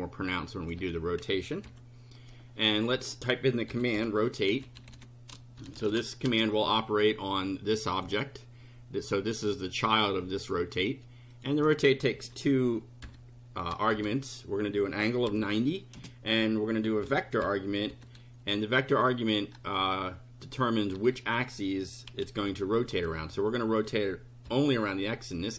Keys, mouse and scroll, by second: 0.0 click, 0.7 2, 1.6 F5, 2.2 click, 2.9 Up, 3.5-6.3 typing, 8.0 click, 10.4 click, 11.3 click, 12.1-15.9 typing, 17.1 v, 17.4 =, 17.9 [, 20.9-24.5 typing.